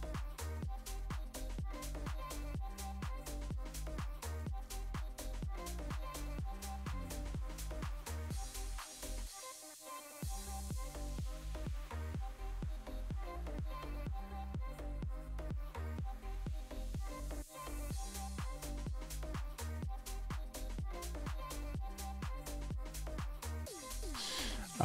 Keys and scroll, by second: 18.4 super+v, 23.1-23.9 typing.